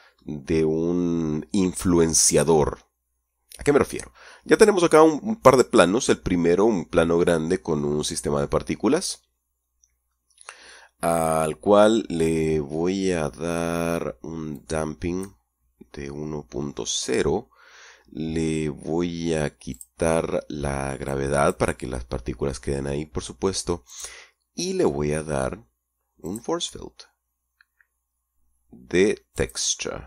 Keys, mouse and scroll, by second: 8.0-8.9 scroll up 1, 8.9-9.5 scroll down 2, 9.5-10.3 scroll up 1, 10.3 scroll up 1, 11.2 scroll down 2, 14.7-15.6 drag, 15.9-16.5 scroll down 2, 19.9 click, 20.4-21.3 scroll down 1, 21.3 click, 22.0-22.7 scroll down 1, 24.1 click, 24.8-26.4 scroll down 1, 26.4 click, 29.5 click.